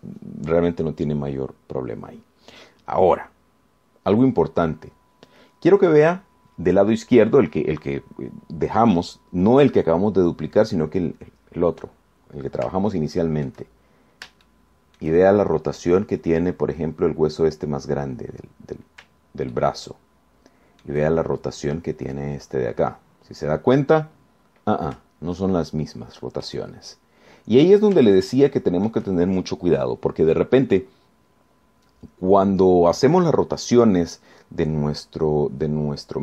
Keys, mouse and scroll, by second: 14.1 shift+click, 15.1-15.5 shift+scroll up 4, 15.7 shift+middle click, 20.7-22.3 shift+middle drag, 25.5 scroll down 2, 26.6-27.9 shift+right drag, 28.9 scroll down 2, 29.3 shift+right click.